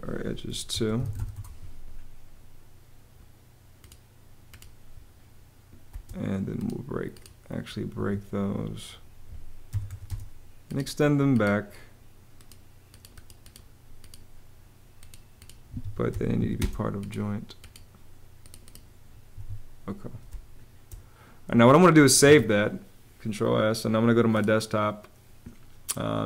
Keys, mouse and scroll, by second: 0.2-1.4 typing, 5.6 space, 7.7 Escape, 9.4 e, 9.8 space, 15.4 Escape, 15.8 m, 16.1 a, 16.3 space, 19.1 Escape, 20.0 space, 22.0 super+s.